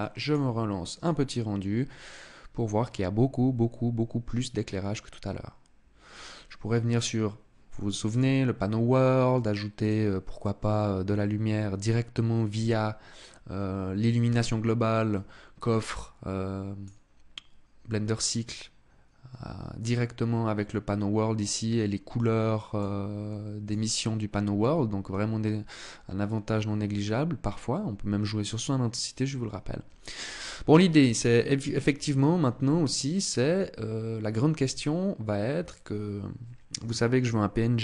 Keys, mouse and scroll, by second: 6.4 click, 7.6 click, 9.4 click.